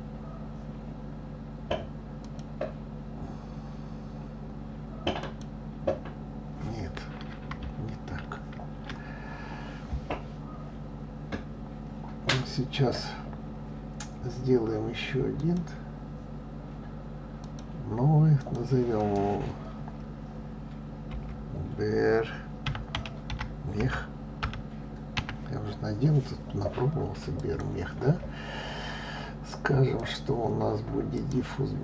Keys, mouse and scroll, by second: 2.2-5.2 drag, 15.4-17.9 drag, 18.4-21.4 drag, 29.9-31.8 drag.